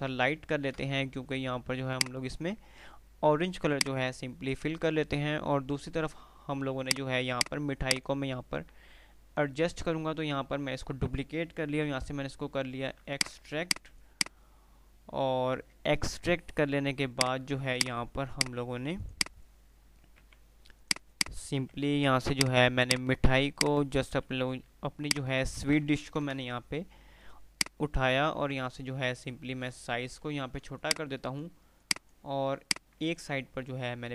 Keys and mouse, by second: 4.1 F3, 6.9 click, 7.9 right click, 11.9 x, 13.2-16.2 drag, 16.2 Delete, 17.2 Delete, 17.2 click, 17.8 click, 18.2 Delete, 18.5 click, 18.8 Delete, 19.2 click, 20.5 x, 21.1 click, 21.9 Delete, 22.5 Delete, 22.5 click, 22.9 click, 23.2 Delete, 23.9-24.7 click, 24.9 F2, 25.2-25.9 F2, 25.2 click, 26.7 shift+Page_Up, 27.9-28.7 drag, 29.1 ctrl+r, 30.9-31.7 drag, 33.7 F3.